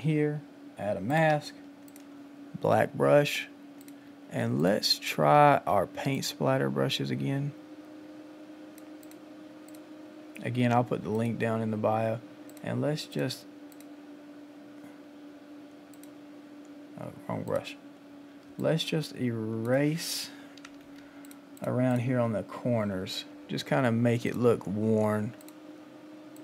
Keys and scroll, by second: 18.5 space.